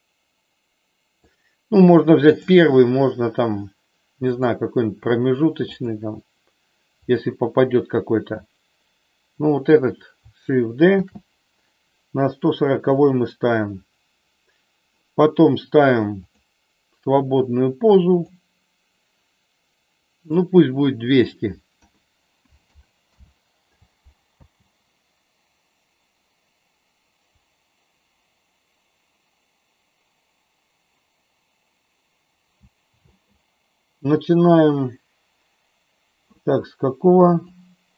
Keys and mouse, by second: 2.3 click, 5.8 click, 7.1 click, 10.9 shift+d, 12.9 click, 16.3 click, 18.2 click, 21.1-23.2 drag, 22.7 KP_0, 24.3 space, 33.1 space, 37.4 click.